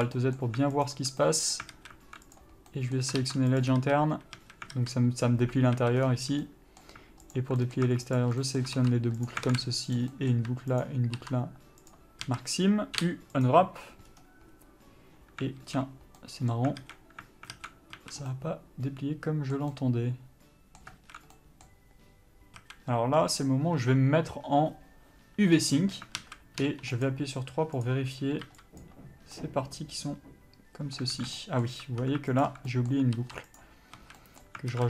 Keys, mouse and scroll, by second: 0.2 alt+a, 0.4 middle click, 1.1 alt+click, 1.5 middle click, 2.0 alt+a, 2.6 click, 3.0 middle click, 3.9 ctrl+e, 4.1 a, 5.0 alt+z, 6.0 alt+a, 6.3-6.8 scroll down 1, 6.8 middle click, 7.6 alt+click, 7.9 middle click, 8.5 alt+shift+click, 8.7 middle click, 9.6 ctrl+e, 9.8 alt+a, 10.2 click, 10.4 middle click, 11.1 ctrl+click, 12.2 ctrl+e, 12.5 a, 13.8 u, 15.9 alt+a, 16.5 middle click, 17.1 alt+a, 18.3 a, 18.6 middle click, 21.3 alt+a, 21.6 middle click, 22.9 a, 26.2 click, 26.5 alt+a, 26.9 3, 27.3 click, 29.1 b, 29.7 middle click, 31.4 alt+a, 31.7 middle click, 32.1 1, 32.7 alt+click, 33.0 middle click, 33.9 ctrl+e, 34.3 a, 34.5 middle click.